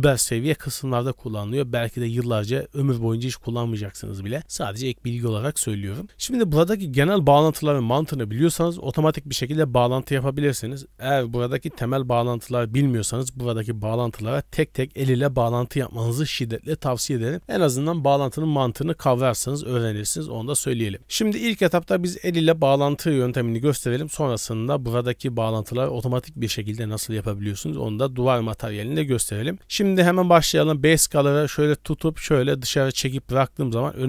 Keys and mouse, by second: 21.1 click, 30.4-34.0 drag.